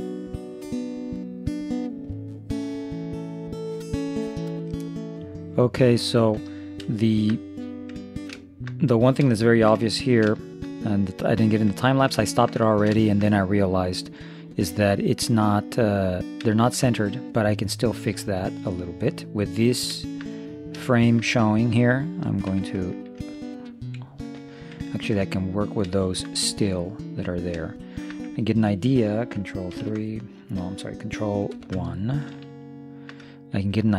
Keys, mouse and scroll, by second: 0.1-1.1 middle drag, 1.3 middle click, 2.4 middle click, 2.8 shift+space, 2.9 middle click, 3.1 middle click, 4.0 ctrl+s, 7.3-14.2 middle drag, 14.2 click, 16.6-17.8 middle drag, 17.8 click, 18.2-19.8 middle drag, 20.9 middle click, 21.2 middle click, 22.6 Tab, 24.9-26.6 middle drag, 29.7 ctrl+KP_3, 31.5 ctrl+KP_1, 32.6-33.9 middle drag.